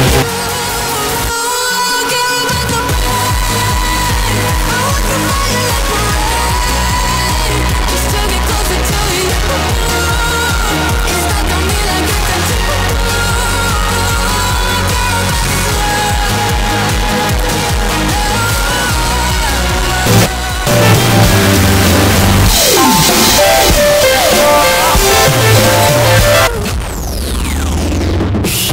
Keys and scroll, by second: 0.2 Page_Down, 26.5 Page_Down.